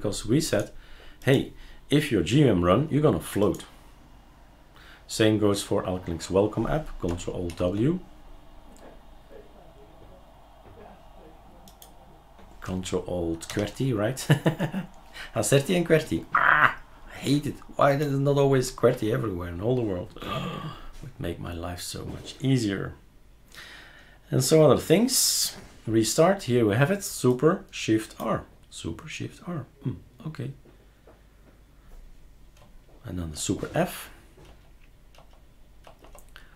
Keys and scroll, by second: 7.5 ctrl+alt+w, 13.5 ctrl+alt+z, 33.3 super+f, 34.5 super+f, 35.2 super+f, 35.8 super+f.